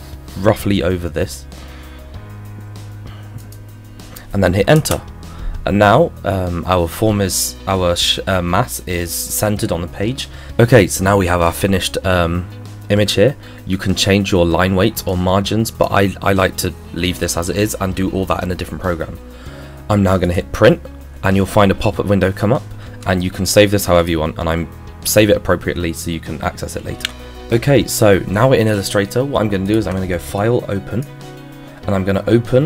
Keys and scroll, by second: 27.0 F4.